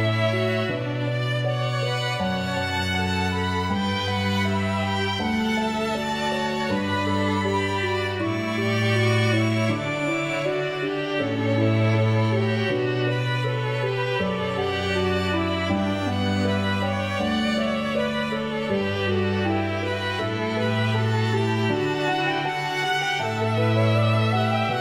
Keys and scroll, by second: 18.5 Escape.